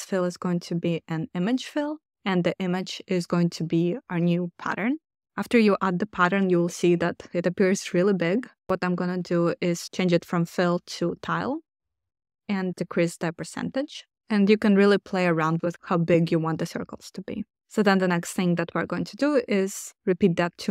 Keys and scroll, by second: 12.7 Return.